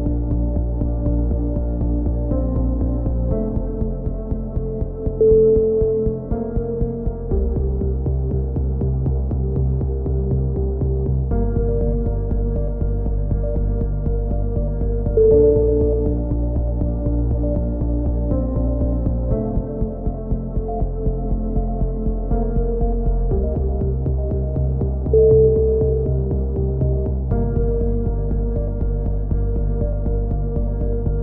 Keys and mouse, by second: 0.3 Tab, 0.4 middle click, 0.5 click, 3.5 KP_3, 4.0 z, 4.6 click, 5.0 Tab, 8.1 b, 9.6 e, 10.0-11.3 drag, 13.1 s, 16.2 c, 17.2-19.7 middle drag, 18.9 s, 21.1-22.3 right drag, 22.0 click, 23.9 KP_3, 25.0 c, 25.9 right click, 26.8 click, 27.8 a, 28.1 middle click, 28.5 z, 28.8 click, 30.1 middle click, 30.7 click.